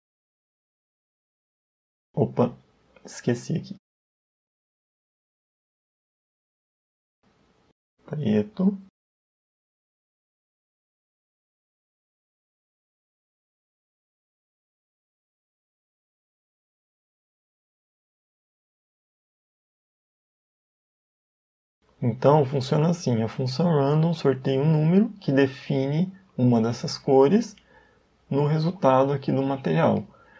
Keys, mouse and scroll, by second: 3.0 ctrl+z, 3.2 ctrl+z, 4.1 click, 5.1 click, 7.4 click, 9.6 click, 10.5 click, 11.6 click, 12.0 click, 14.6 click, 20.6-21.3 scroll down 3, 21.3 middle click.